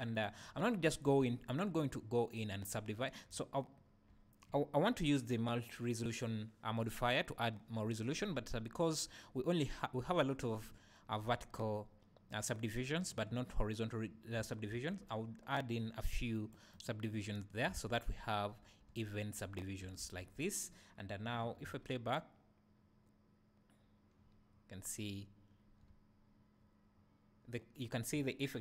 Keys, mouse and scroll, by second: 1.2 Tab, 1.3 Tab, 14.7 ctrl+r, 16.8 right click, 17.7 alt+a, 18.9 `, 20.0 Tab, 21.6 space, 21.8 space, 25.9 `.